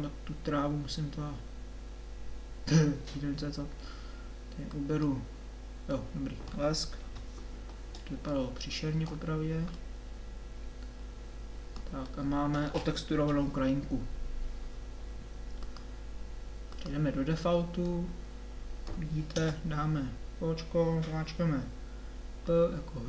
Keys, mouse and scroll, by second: 6.0-7.2 middle drag, 7.2 KP_7, 7.6-8.7 scroll up 1, 9.9 middle click, 13.1 KP_7, 16.1 middle click, 19.4 KP_0.